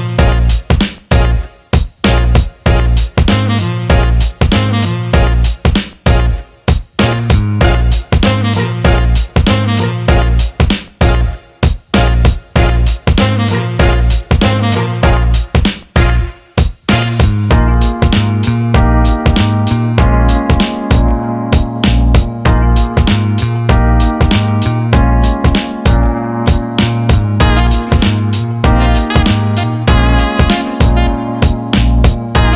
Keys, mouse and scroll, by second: 0.8 alt+middle click, 1.3 alt+shift+middle drag, 1.7-4.7 alt+middle drag, 5.0 alt+middle drag, 5.4 click, 6.1 Tab, 6.6 alt+shift+middle click, 7.6 alt+middle click, 9.2 ctrl+b, 12.5 alt+middle click, 13.3 alt+middle click, 14.4 alt+shift+middle click, 14.8-15.9 alt+middle drag, 18.4 alt+middle click, 19.4 alt+middle click, 20.8 alt+middle click, 21.6 Tab, 22.0 click, 22.3 middle click, 22.9 click, 24.0 click, 24.9-25.5 alt+middle drag, 27.9-28.6 alt+middle drag, 28.7-29.2 alt+shift+middle drag, 29.7-32.0 alt+middle drag, 32.2 alt+shift+middle drag, 32.4 alt+middle click.